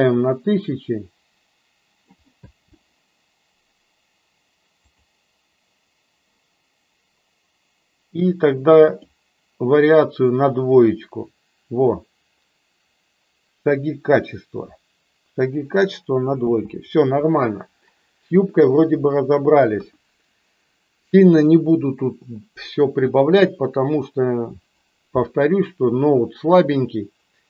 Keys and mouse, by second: 2.3 space, 5.2 click, 9.0 click, 16.7 space, 19.7 KP_1.